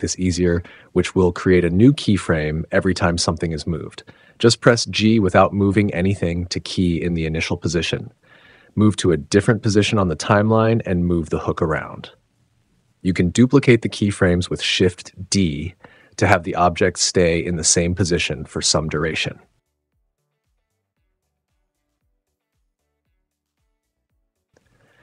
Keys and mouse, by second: 0.0 n, 4.1 g, 4.5 click, 6.3 click, 9.0 g, 9.5 z, 11.4 click, 12.4 g, 12.5 super+z, 12.6 click, 13.1 shift+d, 13.8 click, 14.5 click, 15.0 click, 15.3 space, 16.6 space, 16.8 space, 17.3 space, 17.6 g, 19.4 click, 20.2 click, 20.7 Tab, 20.9 click, 21.3 Tab, 21.5 Tab, 21.7 space, 23.7 space, 24.2 click, 24.7 click.